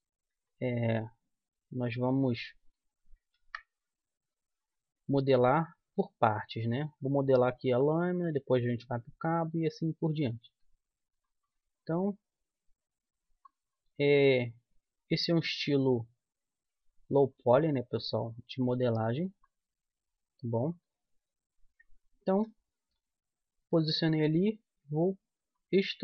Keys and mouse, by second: 0.3 s, 1.9-3.7 drag, 3.4 ctrl+z, 4.3 Tab, 5.2-7.0 drag, 7.6 s, 9.0-10.8 drag, 10.3 Tab, 11.1 click, 11.1-13.5 right drag, 12.4-14.2 drag, 14.0 right click, 14.4-16.4 right drag, 16.5-19.8 drag, 17.3-19.1 right drag, 20.7-23.3 right drag, 22.7 e.